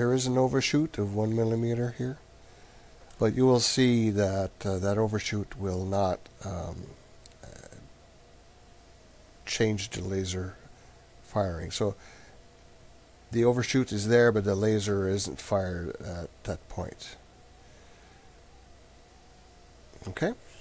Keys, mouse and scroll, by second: 10.9-12.5 middle drag, 12.5-14.1 drag, 15.0-17.5 drag, 17.5-20.6 middle drag.